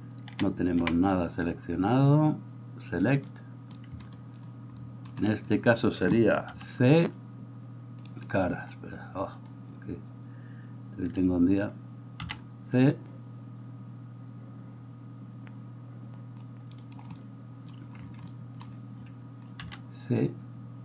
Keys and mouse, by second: 0.4 a, 0.8 a, 16.7-20.8 middle drag.